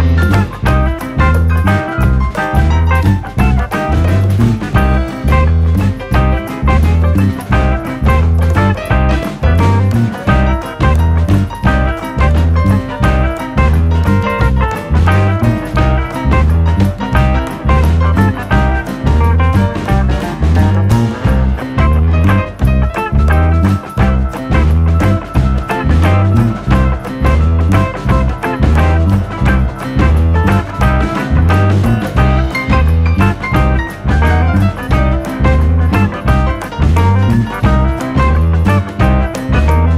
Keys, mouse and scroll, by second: 14.6 n, 14.8 scroll down 2, 15.0 shift+middle click, 16.2 click, 16.4 Tab, 16.7 scroll down 3, 16.8 scroll up 2, 17.2 click, 17.2 scroll down 1, 17.7 click, 18.5 click, 18.9 click, 19.7 KP_3, 20.1-20.5 scroll up 4, 20.5-21.0 scroll down 7, 20.6 ctrl+KP_3, 22.0 click, 22.2 Tab, 22.5 click.